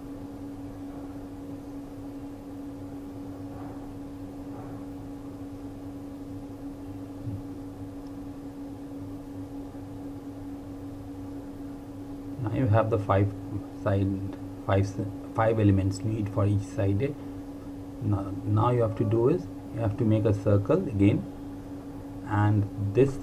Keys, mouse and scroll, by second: 0.0-1.6 typing, 1.1 ctrl+Num_Lock, 1.9 click, 3.2 r, 3.9 alt+click, 4.4 click, 4.8-5.4 typing, 11.5 click, 22.7 click.